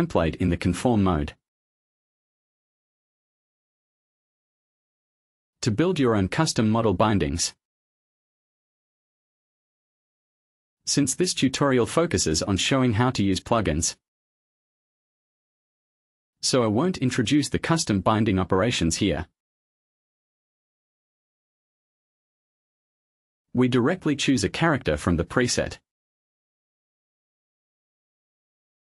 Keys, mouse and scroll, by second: 1.2 click, 3.9 click, 4.6 click, 7.3-7.7 scroll down 1, 9.5 click, 11.6 click, 12.4-12.8 scroll down 1, 14.6 click, 20.9 click, 26.1 click.